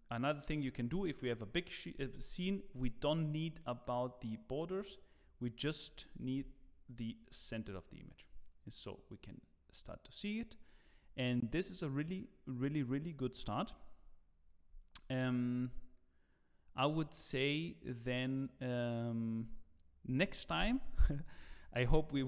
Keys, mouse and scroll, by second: 7.8 ctrl+b.